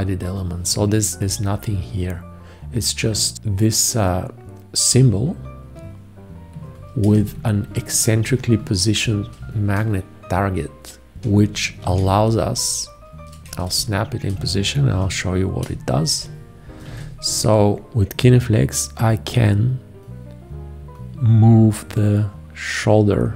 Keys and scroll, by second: 7.2 ctrl+space, 9.0 ctrl+space, 11.8 ctrl+1, 13.4 ctrl+space, 14.8 ctrl+a, 15.7 space, 16.9 g.